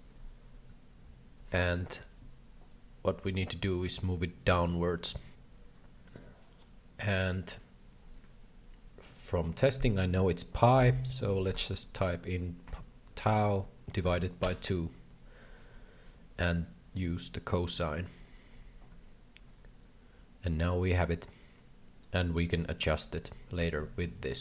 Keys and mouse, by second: 0.0 ctrl+v, 1.4 click, 2.8-7.1 drag, 8.0-15.8 drag, 16.7-18.2 drag, 19.6-23.4 shift+drag, 23.8 alt+a, 24.1 shift+middle click.